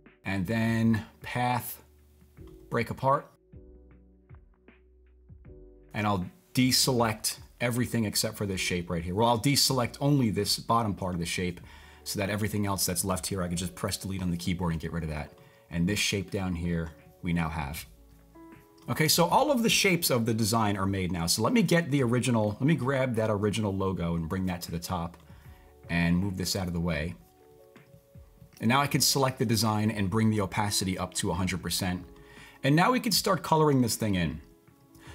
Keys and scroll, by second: 13.9 BackSpace.